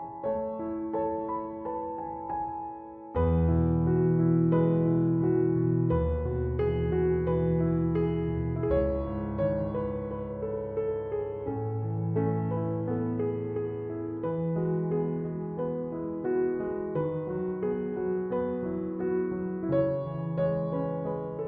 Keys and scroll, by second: 15.1 f, 18.8 Return.